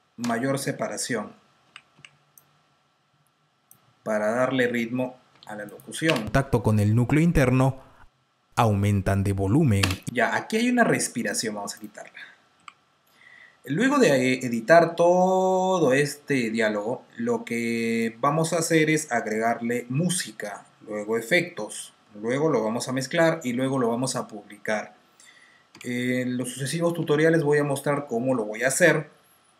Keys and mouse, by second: 0.1 F2, 0.6 F8, 1.8 typing, 3.0-3.8 typing, 3.3 click, 5.3 F7, 5.6 click, 6.3 space, 9.7-11.1 typing, 13.1-13.9 typing, 13.4 double click, 14.4 double click, 14.6 double click, 15.2 click, 25.6 F2, 26.8 Delete.